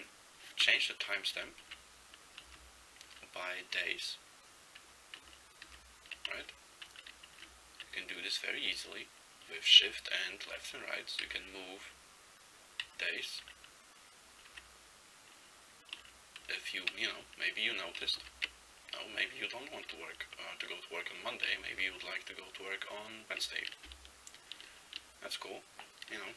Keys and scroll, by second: 1.7 shift+Left, 2.5 shift+Right, 3.2 shift+Left, 3.8 shift+Right, 5.3 shift+Left, 5.7 shift+Right, 6.4 Down, 6.9 Up, 7.4 shift+Left, 10.6 shift+Left, 11.3 shift+Right, 11.9 shift+Down, 12.9 shift+Up, 13.5 shift+Up, 14.7 shift+Right, 16.1 shift+Left, 16.5 shift+Left, 18.1 shift+Right, 18.3 shift+Right, 21.8 shift+Right.